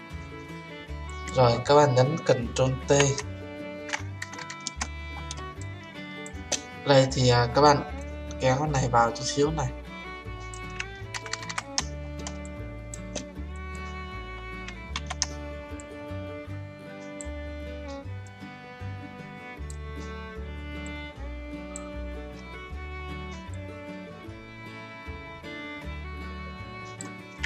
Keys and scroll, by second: 2.7 ctrl+t, 14.9 ctrl+z.